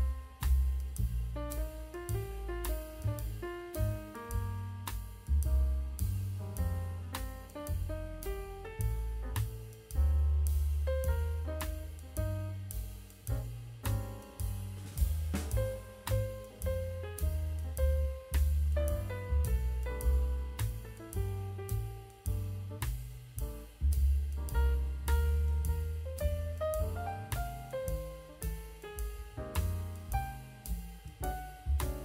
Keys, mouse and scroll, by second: 0.5 click, 1.7 KP_0, 9.7-10.2 middle drag, 10.3-10.7 scroll down 2, 10.7 middle drag, 11.3 click, 13.9 h, 15.0-18.4 drag, 19.3-19.9 middle drag, 20.3-21.0 middle drag, 21.2-21.8 middle drag, 22.6-23.5 drag, 24.2 click, 25.1-26.6 drag, 27.2 middle click, 27.8 click, 29.8 click, 30.4-31.0 scroll down 1, 31.0 h, 31.2-31.9 scroll down 3, 31.9-32.0 scroll down 1.